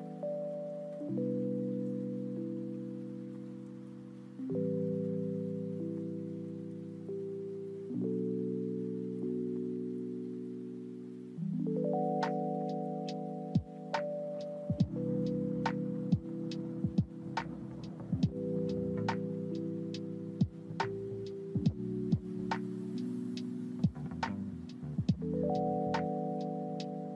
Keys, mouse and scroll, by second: 0.7-5.2 drag, 6.1 click, 9.1-11.4 drag, 12.0-15.0 drag, 15.7 KP_1, 18.1-20.7 scroll down 1, 21.9-27.1 drag.